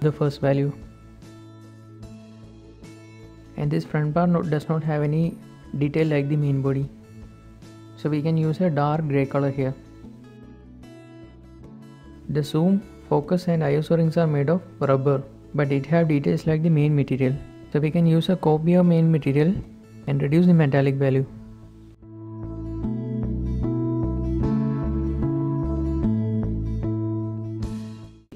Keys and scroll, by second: 22.2 ctrl+shift+z, 25.9 shift+z, 28.0 shift+h.